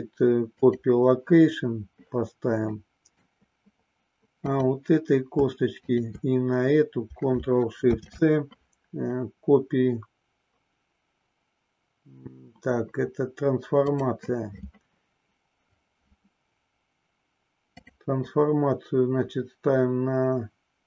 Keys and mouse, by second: 2.7 middle click, 4.4 click, 5.7 shift+click, 17.8-20.8 drag.